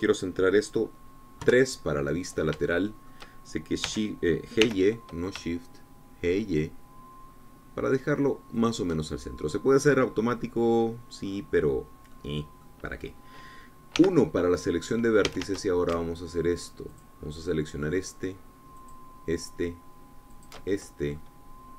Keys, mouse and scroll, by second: 2.4 KP_3, 3.2-3.6 scroll up 3, 3.6-4.7 shift+drag, 4.8 g, 5.6 y, 9.5 shift+click, 10.5-11.7 drag, 11.7-12.2 scroll down 2, 12.2-13.1 scroll up 2, 13.1 click, 13.8 middle click, 13.9 scroll up 2, 14.2-16.3 middle drag, 14.9 1, 16.3 a, 17.9-21.7 alt+shift+drag.